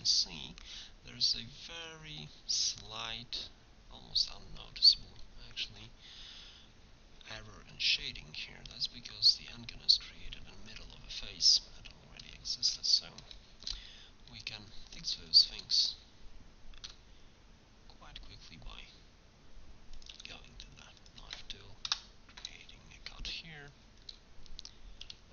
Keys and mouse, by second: 4.9-5.9 middle drag, 7.8 Tab, 10.1 middle click, 10.9 KP_1, 11.1 middle click, 16.9 k, 23.4-25.3 drag, 25.0 k.